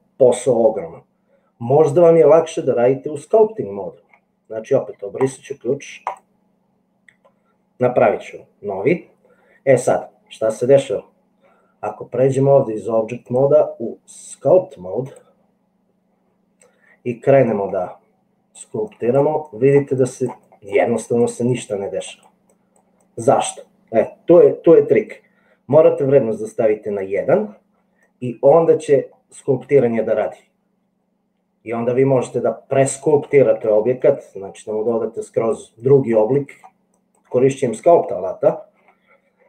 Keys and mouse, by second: 6.1 click, 13.3-15.4 drag, 17.6 click, 19.0 click, 19.6-21.2 drag, 21.6 click, 22.0 click, 22.5 click, 23.2 click, 26.0-27.3 drag, 28.2 click, 29.2-33.6 drag, 34.0 click, 35.2 click, 35.9 click, 36.5 click.